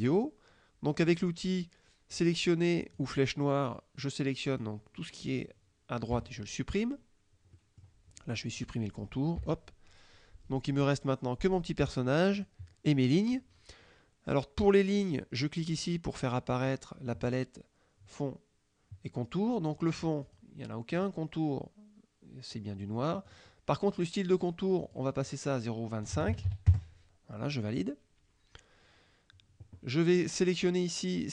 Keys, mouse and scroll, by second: 2.9 click, 4.1 click, 6.2 Delete, 7.6 middle click, 8.6 click, 9.4 Delete, 10.9-12.2 drag, 12.4 click, 16.6 click, 19.8 click, 20.3 click, 21.0 click, 23.3 click, 24.9 click, 25.3 click, 26.1 KP_0, 26.4 KP_2, 26.5 KP_5, 26.7 KP_Enter.